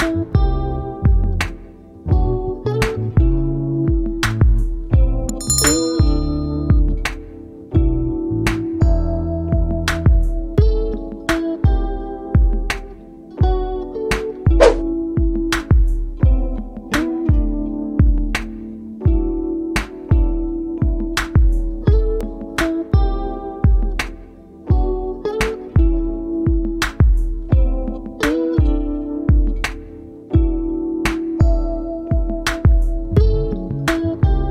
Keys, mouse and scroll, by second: 1.3 ctrl+-, 1.6 ctrl+-, 5.0-6.7 scroll down 1.